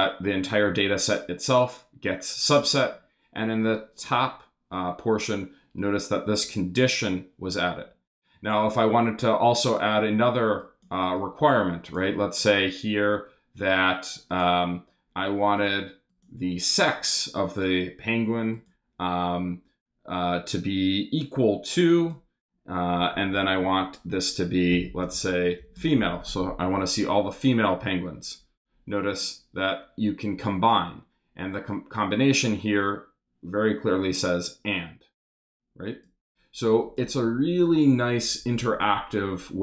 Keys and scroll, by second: 24.5-26.2 typing.